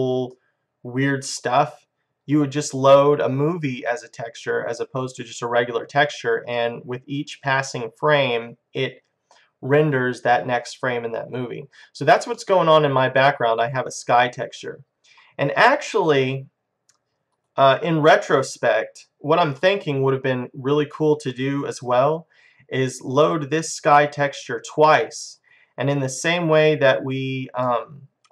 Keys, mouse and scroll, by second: 7.4-9.1 right drag, 10.8-11.9 middle drag, 12.7-14.1 middle drag, 16.1-19.2 drag, 19.7-22.7 middle drag, 25.8-27.4 drag, 27.7 middle click.